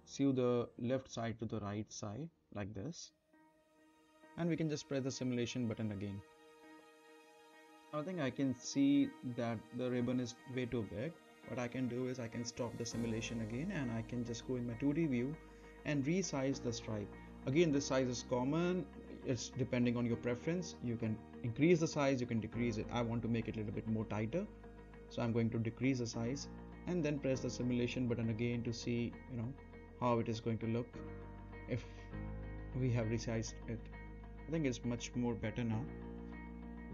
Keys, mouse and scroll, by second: 0.2 n, 1.6 click, 3.9-4.3 right click, 4.6 space, 11.7 space, 12.3-13.9 right drag, 14.1 scroll down 1, 14.4 middle click, 14.7-15.4 scroll up 1, 15.4 z, 16.1 click, 17.7 Right, 20.4 Right, 22.7-24.9 right drag, 25.9 click, 26.8 Up, 29.8-30.4 middle click, 31.0 space, 34.2 space, 34.9-35.8 right click, 35.9 space.